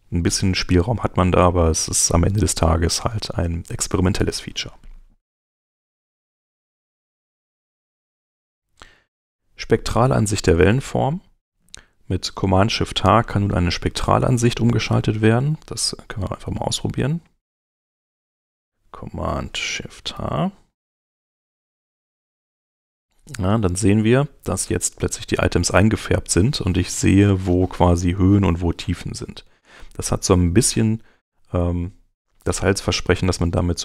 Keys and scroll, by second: 5.4 super+Tab, 17.1 super+Tab, 20.1 shift+super+h.